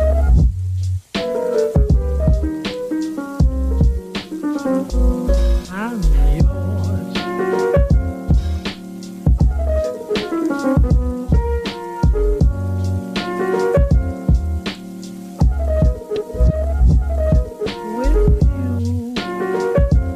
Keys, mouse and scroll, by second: 0.3 alt+z, 0.8-1.9 middle drag, 1.9 click, 3.1 shift+click, 4.4 shift+click, 5.7 shift+click, 7.4 shift+click, 8.6 shift+click, 9.9 middle click, 10.7 shift+click, 11.7 shift+click, 13.8-15.6 middle drag, 15.6 shift+click, 16.6-18.1 middle drag, 18.1 click, 18.8 s.